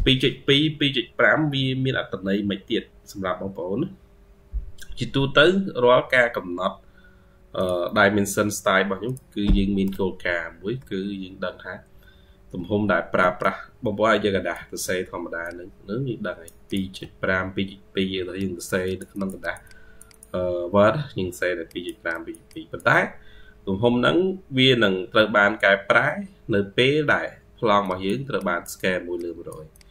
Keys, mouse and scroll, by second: 9.9-10.3 ctrl+scroll down 2, 10.8-11.6 scroll down 35, 11.6-12.9 scroll up 35, 14.7-16.8 ctrl+q, 15.3 ctrl+click, 15.5 ctrl+q, 17.8 ctrl+q, 18.7 double click, 19.0 double click, 19.3 double click, 19.5 double click, 19.9 double click, 20.9 ctrl+q, 22.0 double click, 22.3 double click, 23.3 ctrl+q.